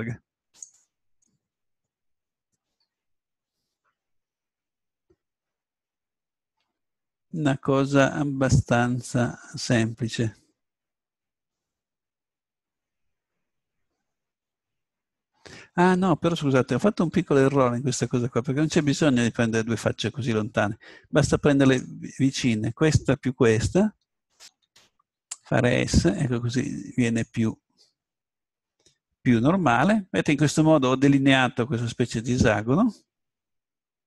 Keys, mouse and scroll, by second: 0.6-2.8 drag, 7.5-9.3 middle drag, 17.0 ctrl+z, 21.7-23.5 right drag, 24.2-25.9 right drag, 25.3 s, 25.9 click, 26.1-27.8 middle drag, 27.8-29.5 drag.